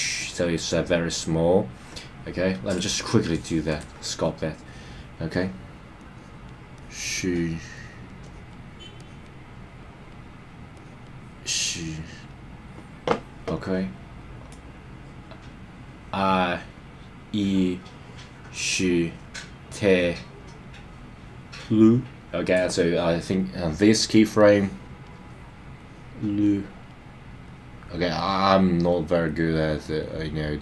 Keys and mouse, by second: 2.7-3.8 drag, 6.0 click, 6.8 click, 7.7 click, 8.2 click, 9.0 click, 9.8 click, 10.7 click, 11.9 click, 14.5-22.5 drag, 24.4 click, 25.8 click, 27.5 click, 28.5 click, 29.6 click.